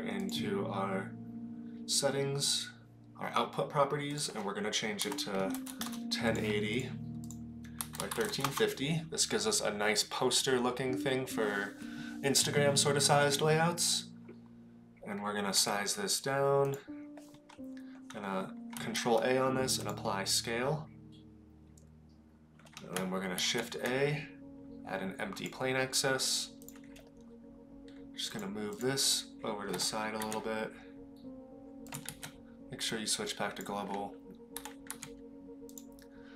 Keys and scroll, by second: 15.6 s, 18.9 ctrl+a, 23.3 shift+a, 29.7 g, 32.2 ctrl+z, 34.6 g.